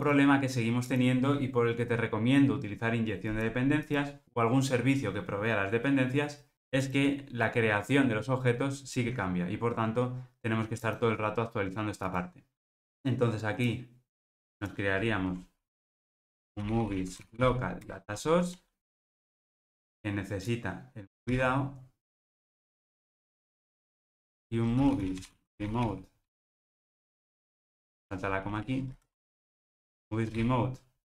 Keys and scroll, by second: 17.9 Return, 21.3 Return, 22.2 super+v.